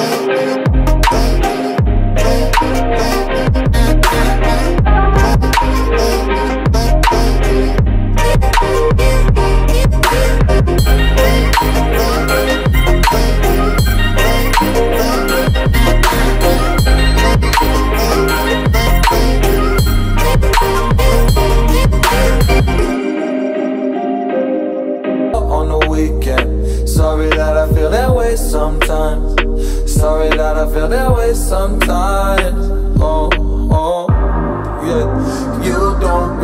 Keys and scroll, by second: 3.7 Return, 4.1 Down, 16.4 Return, 17.0 space, 20.0 space, 23.7 Caps_Lock, 24.2-26.1 typing, 30.8 Return.